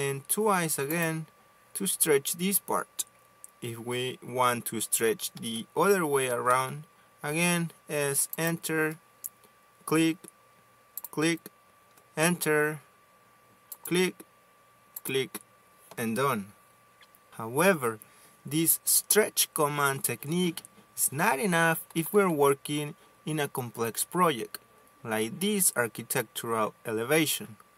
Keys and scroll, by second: 6.2 s, 7.3 space, 12.8 space.